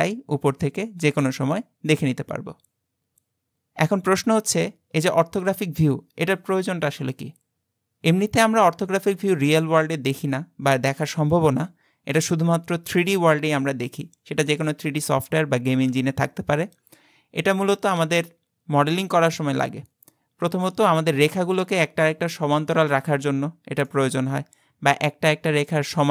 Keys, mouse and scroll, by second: 23.9-26.1 middle drag.